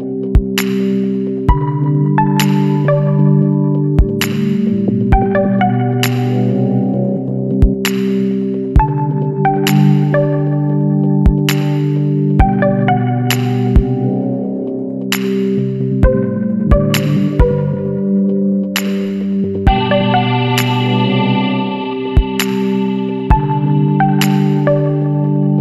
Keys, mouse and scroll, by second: 0.5 click, 2.1 click, 3.1 KP_8, 3.4 KP_0, 3.8 KP_Enter, 5.5-5.8 scroll down 2, 7.1 click, 8.3 scroll down 2, 8.8 scroll up 2, 9.4-12.9 middle drag, 9.7-12.9 drag, 14.4 click, 15.4 KP_4, 16.4 KP_Enter, 19.8 ctrl+click, 21.1 ctrl+click, 22.6 ctrl+click, 23.7 ctrl+click, 24.5 ctrl+click.